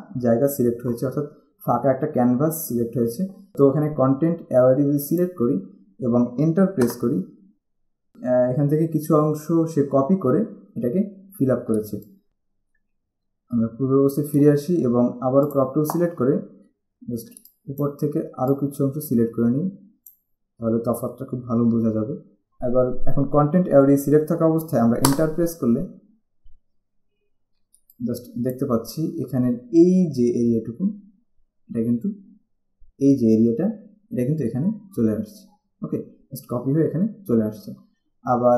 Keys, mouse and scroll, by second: 5.3 click, 7.0 Return, 11.1-11.7 alt+scroll up 2, 12.0 space, 12.1 click, 13.5 ctrl+z, 15.7 click, 17.1 scroll down 1, 17.5 space, 21.5-21.9 scroll down 1, 25.2 Return, 26.9 alt+scroll down 1, 27.9 alt+space, 28.0 alt+click, 28.4 alt+space.